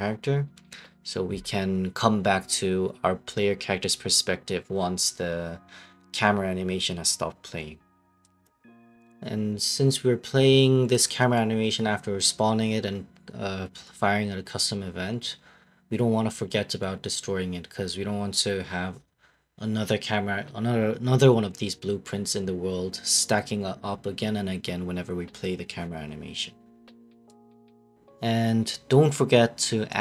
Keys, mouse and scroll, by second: 0.5 right click, 1.0 right click, 1.5 right click, 2.0 click, 2.3 right click, 3.0 right click, 3.1-5.4 typing, 7.7 click, 8.6 right click, 9.0 click, 9.2 right click, 9.5 ctrl+c, 9.7 ctrl+v, 10.2 click, 10.3 a, 11.7 click, 13.4 click, 14.2 click, 14.6-16.2 typing, 14.8 right click, 18.5 click, 18.7-19.4 typing, 19.1 click, 19.4 middle click, 19.4 scroll, 20.3 click, 20.7 1, 21.7 ctrl+a, 21.8-22.8 typing, 23.8 click, 24.6 click, 25.7 click, 26.5 click, 27.2-27.9 typing, 27.7 click.